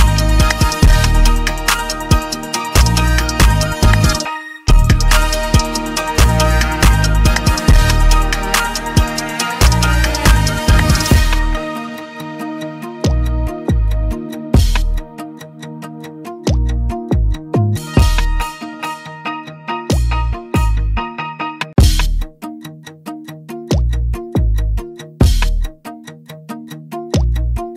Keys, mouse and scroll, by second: 10.5 click, 14.5 click, 15.6 click, 16.8 click, 18.7 click, 22.3 click, 24.1 click, 25.7 click, 27.4 click.